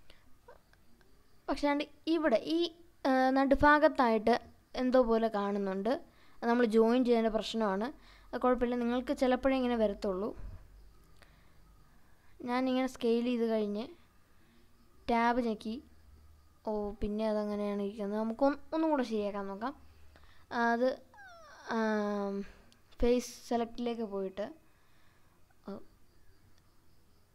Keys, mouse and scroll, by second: 0.2-0.8 shift+middle drag, 1.1-1.5 scroll up 2, 1.9-2.7 shift+middle drag, 3.2-4.0 scroll up 3, 4.2-5.2 shift+middle drag, 5.4 scroll up 1, 6.4 Tab, 7.5 click, 9.0 s, 12.6 right click, 12.9-13.5 scroll down 4, 13.9 middle click, 14.9 Tab, 16.1-16.6 scroll up 2, 16.7-17.1 scroll up 2, 17.5 scroll down 2, 18.2 Tab, 19.4 scroll up 1, 23.3 click, 24.4 click.